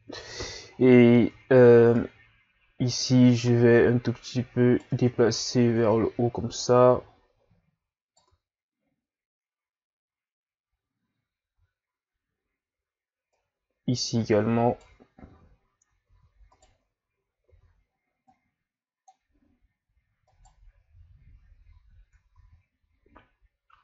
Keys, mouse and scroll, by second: 0.3-0.8 ctrl+scroll down 1, 0.8 scroll up 1, 1.0 Tab, 2.0 right click, 4.9 Tab, 5.8 Tab, 6.6 right click, 8.3 Tab, 11.6 Tab, 13.3 right click, 15.3 z, 16.1 ctrl+z, 16.5 right click, 17.6 z, 18.2 click, 20.3 right click, 21.7 ctrl+z, 22.3 ctrl+z.